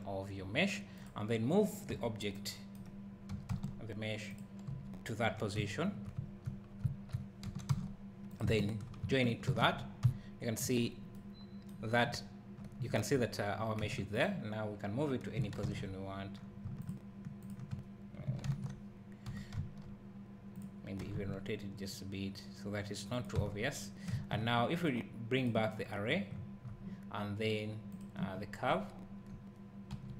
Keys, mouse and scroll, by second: 1.0 click, 1.9 KP_7, 3.3 g, 4.4 click, 4.7 KP_Decimal, 5.2 scroll down 1, 5.6 `, 5.8 `, 6.6 scroll down 1, 7.5 g, 8.4 click, 8.6 shift+click, 9.5 ctrl+j, 10.0 `, 10.8 scroll up 1, 13.8 Tab, 14.1 click, 15.6 ctrl+l, 16.8 shift+click, 18.5 ctrl+l, 19.3 g, 20.6 click, 21.0 r, 23.2 click, 23.4 Tab, 25.4 click, 25.8 scroll down 1, 27.9 click, 28.3 scroll down 1, 29.9 KP_Decimal.